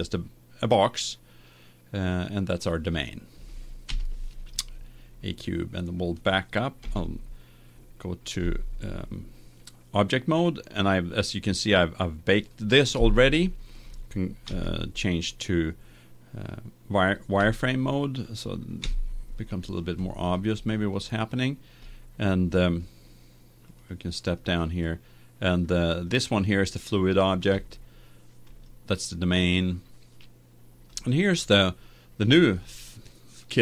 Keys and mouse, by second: 3.9 KP_1, 6.9 Tab, 8.5 Tab, 12.4-14.3 drag, 14.4 z, 16.1-17.7 middle drag, 17.9-19.5 middle drag, 22.3-23.6 middle drag, 23.6-26.0 drag, 26.0 middle click, 26.4-27.5 drag, 27.5 right click, 28.4-30.2 right drag, 30.2 middle click, 30.8-32.7 right drag, 32.7 middle click.